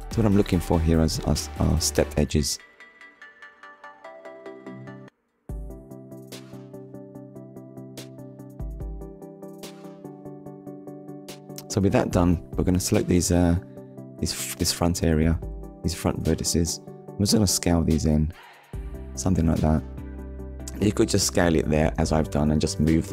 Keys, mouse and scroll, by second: 0.0 click, 0.5 scroll down 1, 1.4 middle click, 4.4 KP_3, 5.4 scroll up 1, 5.9 shift+middle click, 6.7 Tab, 7.4-8.1 scroll up 2, 8.3 shift+middle click, 10.0 click, 10.8 click, 16.6 click, 18.0 click, 20.7 ctrl+z, 22.7 click.